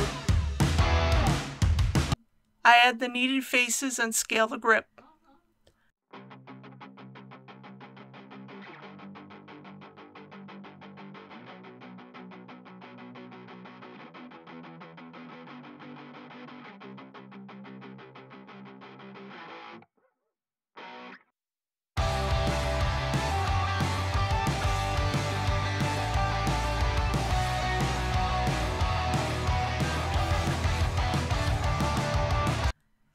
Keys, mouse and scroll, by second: 1.2 middle click, 1.9 2, 2.2 click, 3.1 shift+click, 4.5-6.2 middle drag, 7.1 ctrl+z, 7.4 shift+click, 8.0 shift+f, 8.6 click, 8.9 middle click, 10.1 shift+click, 10.5 shift+click, 10.6 shift+f, 11.6 click, 12.0 shift+click, 12.3 shift+click, 12.7 shift+f, 13.0 alt+a, 13.4 1, 13.7 click, 13.9 right click, 14.3 click, 15.0 middle click, 16.7 2, 16.9 click, 17.2 shift+click, 17.6 shift+f, 18.1 1, 18.3 click, 18.5 right click, 18.9 click, 19.2 1, 19.8 2, 19.8 middle click, 20.6 click, 20.8 shift+click, 21.2 shift+f, 21.5 click, 22.3 shift+click, 22.5 shift+f, 23.5 a, 23.9 middle click, 24.5 scroll down 1, 24.7-25.0 typing, 26.5 click, 26.7 middle click, 27.5 alt+a, 28.1 middle click, 28.7 click, 29.2 3, 29.3 click, 30.0 x, 30.2 click, 30.6-32.7 middle drag, 32.8 shift+a.